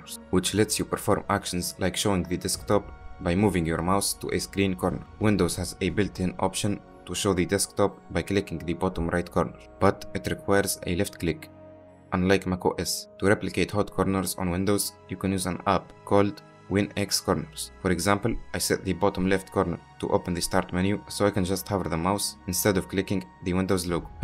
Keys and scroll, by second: 16.8-18.3 typing.